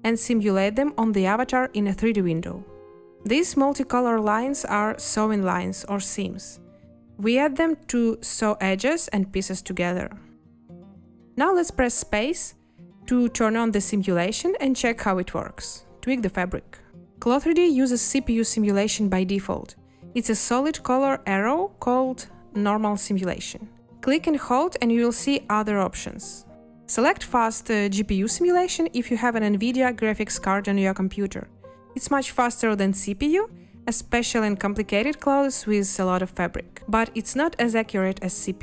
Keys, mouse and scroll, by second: 12.5 space.